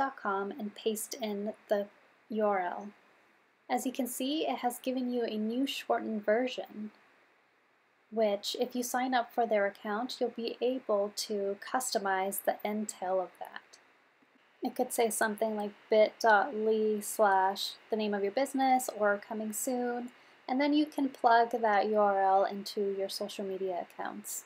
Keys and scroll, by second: 0.9 super+v.